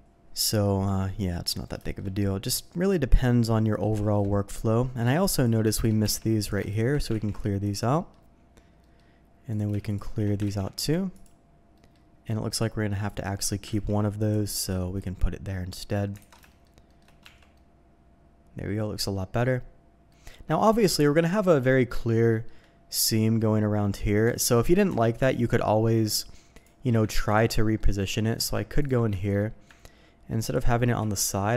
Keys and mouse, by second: 0.5 middle click, 1.3 middle click, 1.8 shift+middle click, 2.4-3.8 middle drag, 4.0 shift+middle click, 4.6 middle click, 5.3 click, 6.0 Tab, 6.4 click, 6.7 shift+click, 7.3 ctrl+e, 7.9 middle click, 8.8 click, 9.5 click, 9.8 shift+click, 10.6 ctrl+e, 11.7 click, 12.5 click, 13.7 ctrl+e, 14.9 click, 16.2 alt+a, 16.5 shift+middle click, 16.9 shift+click, 17.2 Tab, 17.5-20.1 drag, 20.3 click, 20.7 shift+drag, 21.3 middle click, 21.7 shift+middle click, 22.3 shift+middle click, 24.2 Tab, 25.1 alt+click, 27.8 middle click, 28.1 shift+middle click, 28.2 shift+click, 28.8 ctrl+click, 29.1 shift+click, 30.4 ctrl+click, 31.0 ctrl+e.